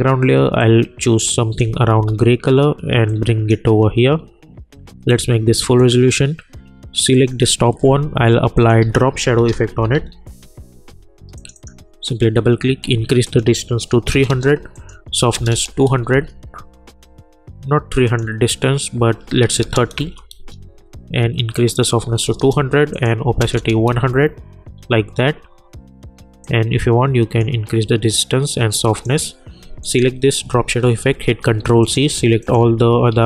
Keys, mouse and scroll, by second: 1.6 Return, 3.1-5.1 drag, 8.9 ctrl+a, 9.0-10.4 typing, 11.3 click, 16.1 Return, 18.0 click, 19.9 Return, 21.5 click, 23.9 Return, 26.4-29.8 drag, 31.0 ctrl+c, 31.8 click, 32.4 shift+click, 33.1 ctrl+v.